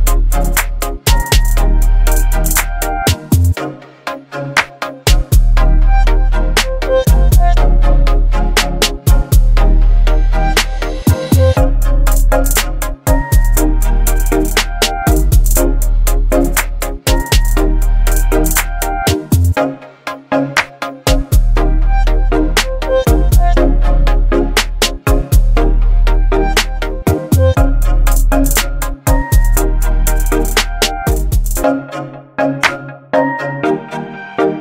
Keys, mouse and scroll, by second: 1.4-1.9 alt+scroll up 2, 2.4-2.7 click, 2.5 space, 3.2 t, 4.9 click, 7.0 shift+r, 10.7 ctrl+a, 12.3 click, 18.1-18.5 scroll up 1, 19.4-30.7 drag, 33.6 v, 34.4-34.6 shift+drag.